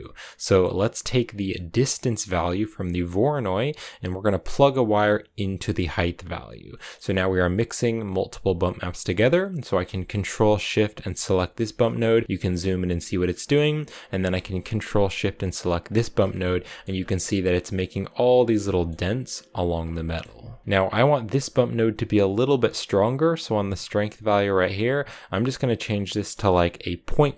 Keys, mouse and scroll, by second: 0.9 scroll up 1, 1.1 middle click, 1.9-2.8 scroll down 1, 2.8-3.2 scroll down 1, 3.2 click, 6.5 middle click, 6.8-7.8 scroll up 3, 8.4 click, 9.2 middle click, 9.4 scroll up 2, 11.1 ctrl+shift+click, 11.7 shift+middle click, 12.0 scroll up 4, 13.1-15.7 middle drag, 15.7 ctrl+shift+click, 16.5 shift+middle click, 16.8 scroll up 3, 18.5-19.6 shift+middle drag, 19.6 scroll down 3, 19.9 shift+middle click, 20.6 scroll up 2, 23.6-26.7 drag.